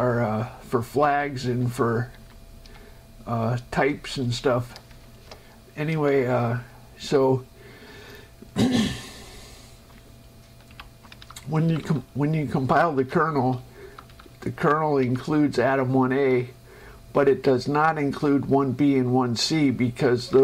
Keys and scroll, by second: 5.5 shift+Escape, 6.5 Down, 11.0 Up, 11.5 Down, 13.3 space, 13.9 Down, 15.4 Up.